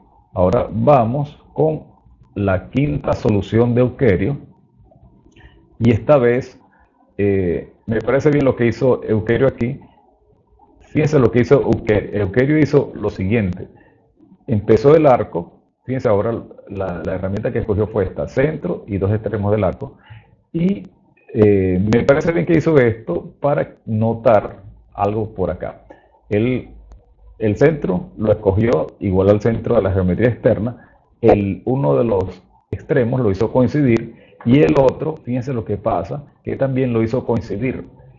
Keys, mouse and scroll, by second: 0.9 click, 6.6 click, 9.1-11.3 drag, 36.6 click.